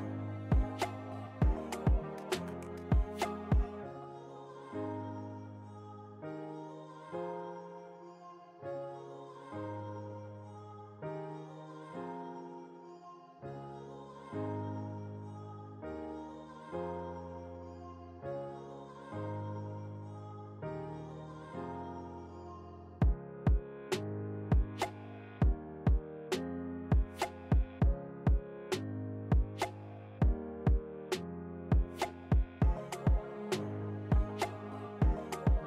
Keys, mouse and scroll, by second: 0.2 click, 1.6 Down, 3.6 alt+scroll down 1, 4.4 click, 4.9 ctrl+s, 8.4 click, 9.7-10.3 typing, 10.1-14.4 drag, 14.4 alt+scroll down 1, 15.4 ctrl+t, 16.2-22.6 drag, 18.4 typing, 22.6 Return, 23.5 click, 25.1-29.5 drag, 29.5 ctrl+t, 32.7 Return, 33.6-35.6 drag.